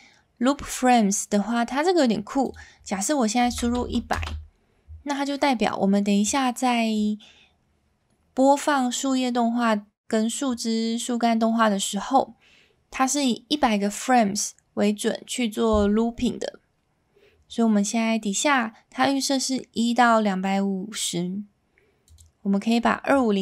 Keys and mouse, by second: 2.6-5.0 drag, 3.8 KP_0, 6.3 click, 22.1-23.4 drag.